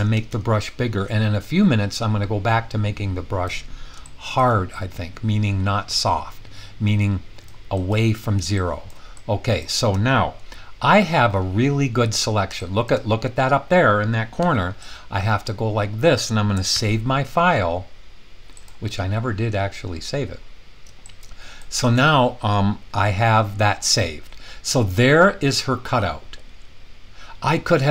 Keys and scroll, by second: 0.0-0.3 typing, 14.4 typing, 16.8 super+s.